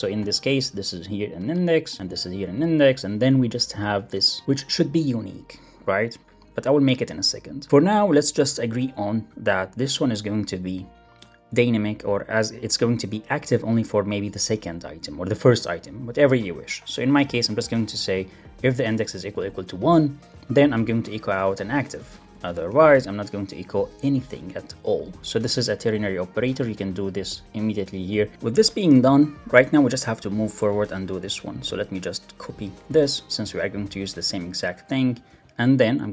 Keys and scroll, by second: 0.5 super+v, 1.9 shift+Right, 2.1 super+v, 2.8 alt+Right, 3.5 Left, 3.8 shift+Right, 4.0 Return, 4.6 alt+Up, 7.6 Return, 8.7 super+BackSpace, 10.3 alt+Up, 15.1 Right, 15.2 Left, 17.8 super+v, 21.9 alt+Left, 22.6 alt+Right, 25.2 alt+super+l, 25.3 super+s, 26.5 alt+Up, 32.7 super+Left, 33.0 shift+super+Right, 35.2 super+x, 35.5 super+BackSpace, 36.0 Up.